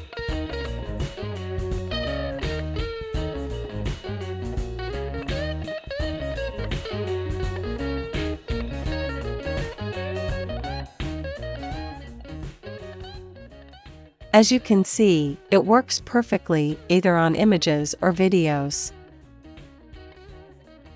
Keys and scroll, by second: 3.8-5.2 typing, 7.3 super+s, 9.2 space, 12.8-14.2 typing, 14.5 Return, 16.6 super+s, 18.3 space, 20.4 space.